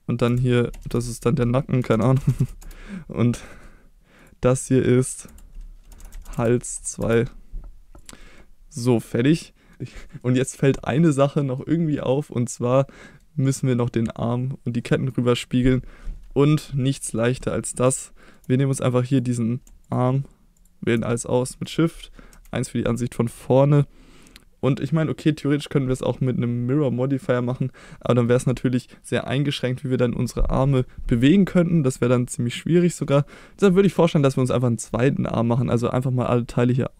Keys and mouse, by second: 0.3 F2, 3.5 middle click, 4.2-4.6 drag, 4.6 middle click, 5.3 F2, 8.0 click, 8.4-9.0 middle drag, 9.5 middle drag, 10.2-10.6 middle drag, 11.0-11.6 middle drag, 13.1 middle drag, 14.9 middle drag, 15.5 middle click, 17.1 middle drag, 18.1-18.4 shift+middle drag, 19.1 click, 19.9 shift+click, 20.6 shift+click, 21.4 middle drag, 22.3 KP_1.